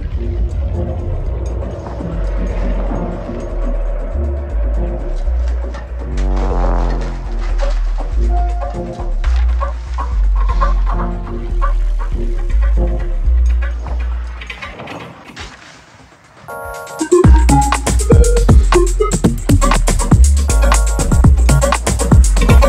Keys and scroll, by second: 0.4 x, 1.3 x, 3.8 shift+Right, 4.6 shift+Right, 5.7 shift+Left, 5.9 shift+Right, 6.0 shift+Up, 6.1 shift+Left, 6.2 shift+Down, 9.5 ctrl+r, 11.0 ctrl+r, 14.2 shift+t, 14.5 y, 14.6 BackSpace, 14.7 Return, 15.6 x, 17.0 ctrl+r, 18.3 ctrl+r, 19.5 ctrl+x.